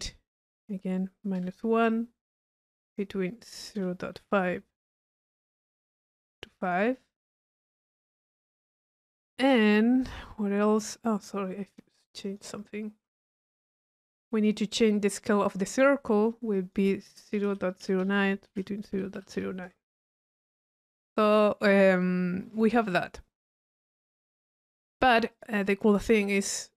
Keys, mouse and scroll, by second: 0.4 click, 2.4-3.2 drag, 5.5 click, 6.6 click, 7.4-8.0 drag, 8.7-10.0 middle drag, 11.0 click, 12.2 click, 13.7 middle click, 14.2 click, 15.3 click, 16.6 click, 20.7 click, 25.3-25.8 drag.